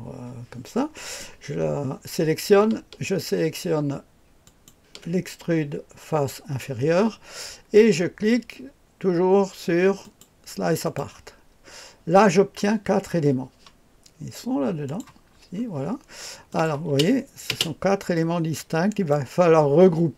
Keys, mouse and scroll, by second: 4.4 ctrl+click, 10.0 click, 10.8 click, 12.3-14.8 scroll down 1, 14.8 click, 15.2-15.8 scroll down 1, 16.5 click, 16.9 space, 17.5 space, 18.1-19.1 drag.